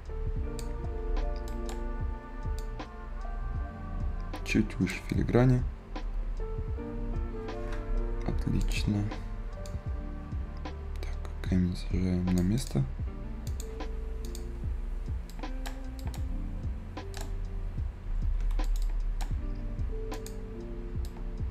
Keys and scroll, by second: 8.7 Escape.